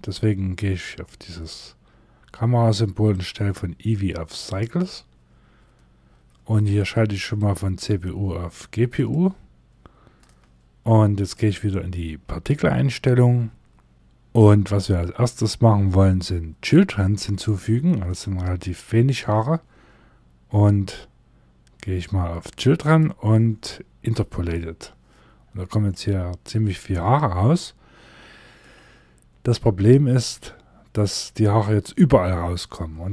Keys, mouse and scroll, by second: 0.3 click, 14.6 scroll down 1, 17.6 middle click, 18.3 scroll up 2, 22.3 click, 24.9 scroll down 1, 25.4 middle click, 33.0 Tab.